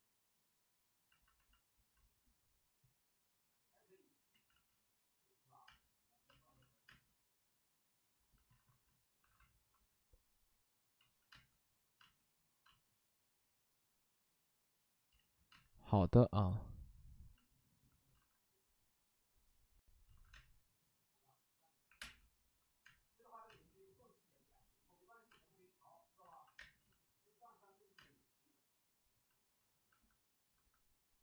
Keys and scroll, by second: 4.3 ctrl+z, 4.4 ctrl+z, 5.6 space, 6.2 space, 6.5 ctrl+z, 6.8 space, 8.5 alt+s, 9.1 alt+s, 10.9 ctrl+z, 11.3 space, 11.9 space, 12.6 space, 15.1 ctrl+z, 15.5 space, 18.1 alt+s, 20.0 alt+s, 20.3 space, 21.8 3, 21.9 space, 22.8 space, 23.4 space, 25.2 space, 26.2 alt+s, 26.5 space, 26.8 ctrl+z, 27.9 space.